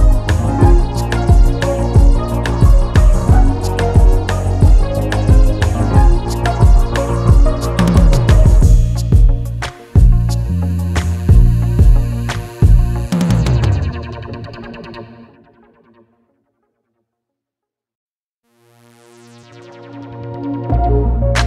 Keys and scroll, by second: 5.5 ctrl+t, 10.1 alt+Return, 10.9 alt+Return.